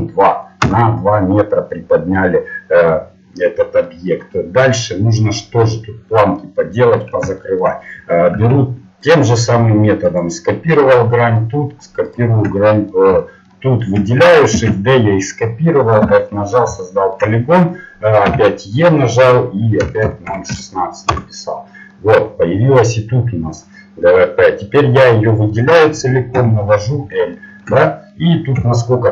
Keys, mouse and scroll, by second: 3.4-4.9 middle drag, 9.1 ctrl+Tab, 10.1 right click, 11.1-13.9 middle drag, 14.5 shift+d, 16.0 f, 18.3 e, 21.9-23.7 middle drag, 24.8-25.8 middle drag, 26.3 l, 28.6 KP_1.